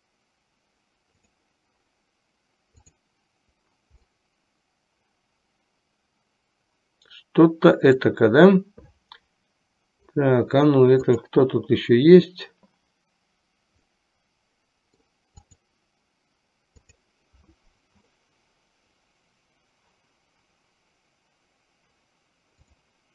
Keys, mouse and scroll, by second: 1.3 click, 4.4-8.2 middle drag, 13.9-15.2 middle drag, 15.7 click, 16.9 click.